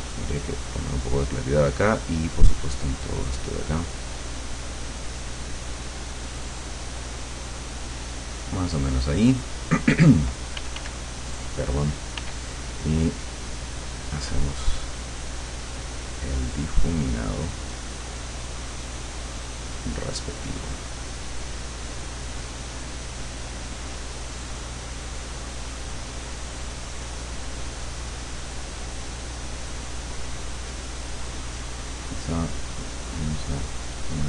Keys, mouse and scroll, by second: 2.4 click, 3.8 click, 4.8 click, 5.6 click, 6.8-7.8 drag, 8.8 click, 9.8 click, 10.6 f, 11.2-19.6 drag, 12.2 f, 32.6 click, 33.6 click.